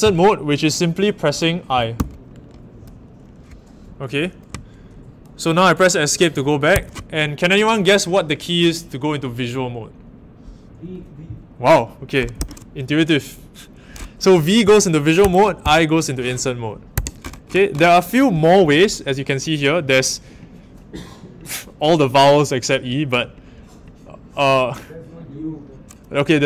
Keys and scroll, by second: 1.9 i, 6.7 Escape, 12.4 v, 15.2 Escape, 15.6 i, 16.9 Escape.